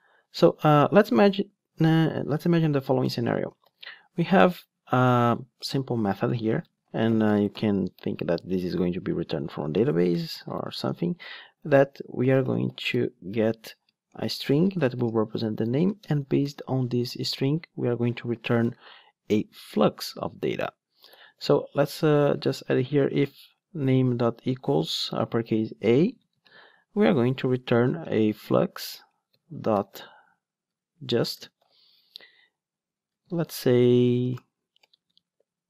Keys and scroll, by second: 23.0 Return, 32.2 Return.